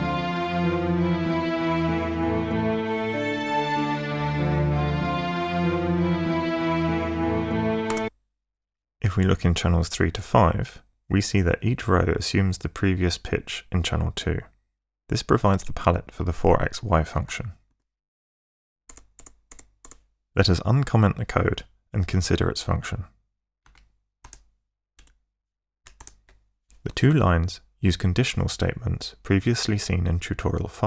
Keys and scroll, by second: 7.9 space, 18.9 ctrl+shift+Tab, 23.7 Tab, 24.3 BackSpace, 25.0 Up, 26.0 Delete.